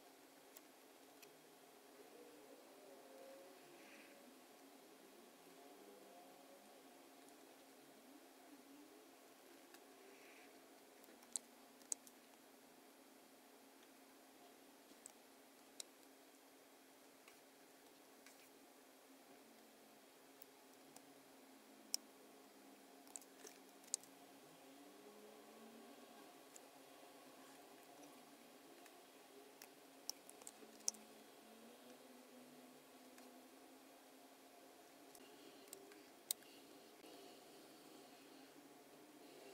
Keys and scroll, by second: 11.8 super+9, 11.8 super+F9, 23.8 super+F9, 30.7 super+F9, 35.7 space.